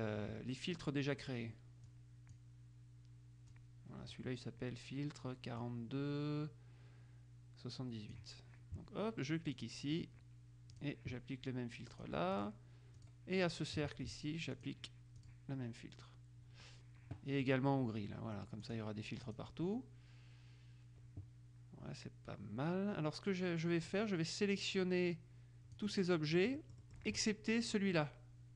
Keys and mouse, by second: 0.0 click, 2.0 click, 3.7-4.7 drag, 5.7-8.7 drag, 9.7 click, 10.9 click, 12.1-13.7 drag, 14.7 click, 15.5 click, 17.6 click, 18.8 click, 19.6 click, 24.1-26.4 drag, 26.5-27.6 middle drag.